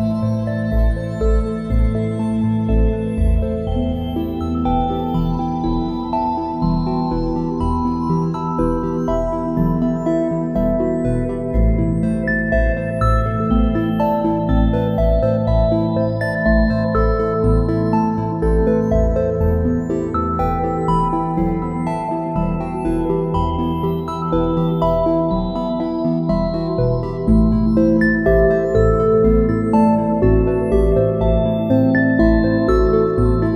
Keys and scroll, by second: 4.8 a, 5.4 space, 7.2 `, 8.6 ctrl+shift+a, 9.6 space, 14.6 a, 16.8 space, 23.1 `, 29.9 a, 32.4 space.